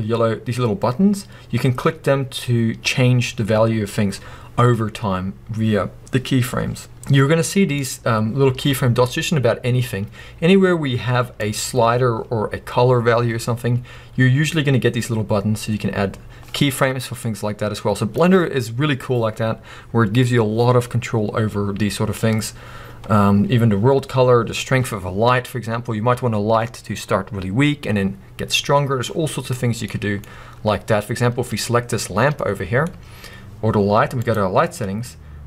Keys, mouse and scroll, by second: 7.8 click, 10.1-10.4 scroll up 1, 11.4 click, 17.2-29.9 drag, 29.5 scroll down 1, 29.9-31.5 middle drag, 30.3-31.5 scroll down 2, 31.5 click, 32.4-34.2 middle drag, 34.2 click.